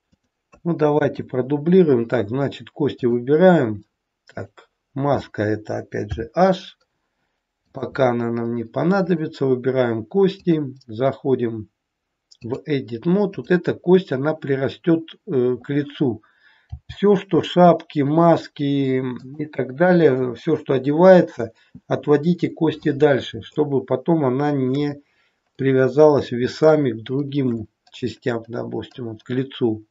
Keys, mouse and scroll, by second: 1.0 KP_3, 2.9 click, 4.4 click, 6.0 h, 7.6 click, 9.0 click, 13.2 click, 16.6 g, 23.5 shift+middle click.